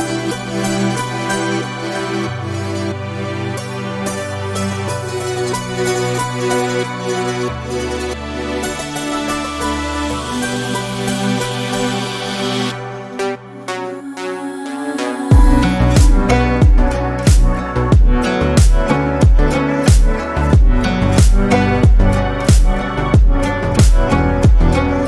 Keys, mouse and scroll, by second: 1.6 ctrl+click, 1.9 middle click, 2.7 click, 4.0 Tab, 4.3 scroll down 1, 4.4 click, 4.7-6.2 middle drag, 6.2-6.6 scroll up 3, 6.6-6.9 middle drag, 6.9 Tab, 8.7 middle click, 9.6 click, 10.3-11.4 middle drag, 11.4 ctrl+click, 12.3 click, 13.4 click, 14.7 Tab, 15.2-16.4 middle drag, 16.4 Tab, 17.1 ctrl+z, 17.4 ctrl+z, 18.4-20.2 middle drag, 21.1 click, 21.7 shift+click, 22.1 shift+click, 22.5 shift+click, 23.1 middle click, 23.7 click.